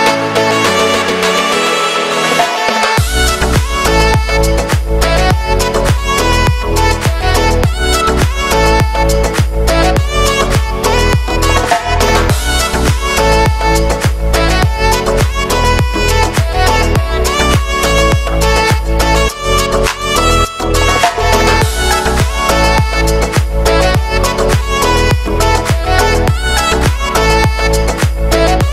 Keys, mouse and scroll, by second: 0.4 Tab, 0.5-0.8 scroll down 6, 0.8 middle click, 2.5-4.9 drag, 4.9 w, 7.3-8.8 drag, 9.9-13.5 right drag, 13.5 q, 14.8 Tab, 15.1 shift+middle click, 16.0-17.5 drag, 20.7-21.3 scroll up 3, 21.3 right click, 21.6 q, 22.1 q, 22.8-23.3 scroll down 2, 23.3 Tab, 24.3 right click, 24.6 Tab, 24.9 middle click, 25.3 right click, 25.8 q, 26.6 right click, 27.0 l, 27.4 middle click, 27.6 g.